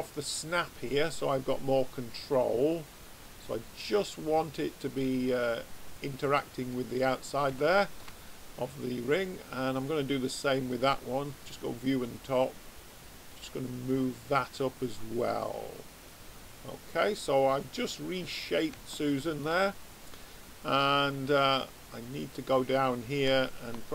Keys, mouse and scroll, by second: 0.6-2.7 drag, 6.4 middle click, 7.5 middle click, 8.3-9.7 middle drag, 9.7-12.4 drag, 12.4 middle click, 13.3 click, 16.8-21.8 middle drag, 22.4-23.9 drag.